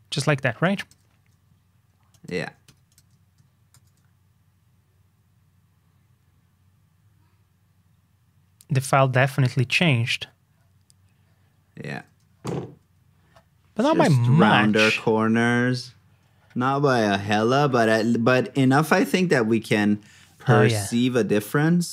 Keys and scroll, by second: 3.7 shift+super+g.